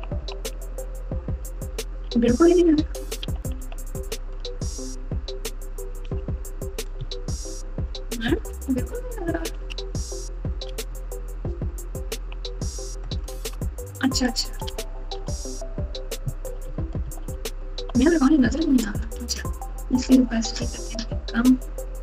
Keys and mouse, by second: 0.0-0.6 typing, 2.0-6.0 typing, 6.9 KP_Subtract, 7.3 KP_Subtract, 7.3 KP_Subtract, 8.1-10.8 typing, 12.1 KP_2, 13.0 KP_Add, 13.3 KP_Add, 13.5 KP_Add, 15.2 alt+z, 16.6 KP_8, 17.0 KP_8, 17.2 KP_8, 17.7 KP_7, 20.7-22.0 drag.